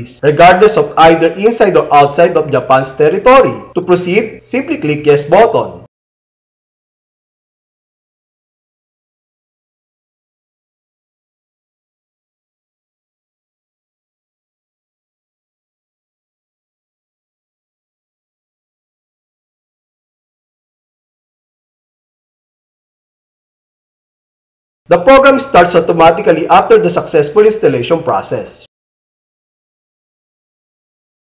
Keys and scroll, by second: 4.9 alt+y, 21.7 Return, 29.6 super+Home.